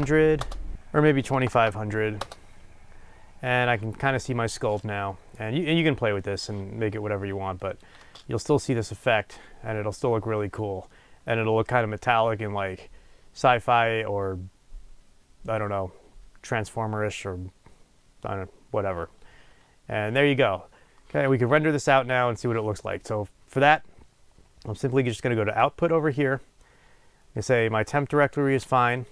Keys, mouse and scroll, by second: 0.4 KP_0, 0.6 Return, 7.1-29.1 drag.